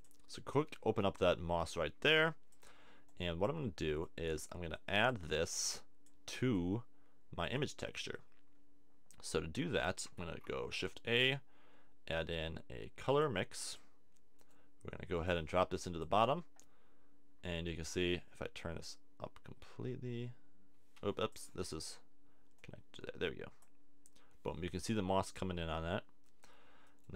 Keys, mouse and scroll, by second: 0.6 middle click, 5.7 click, 6.6 click, 10.2 shift+a, 17.8 click, 22.6-23.6 drag, 24.5 middle click.